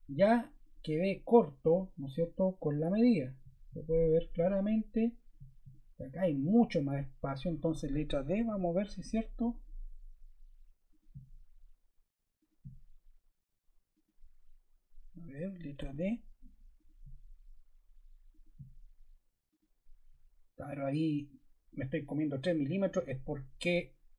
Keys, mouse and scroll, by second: 8.4 d, 12.3 click, 13.9 click, 15.3 ⏲, 15.7 d, 16.7 click, 18.3 click, 19.4 click, 22.9 click.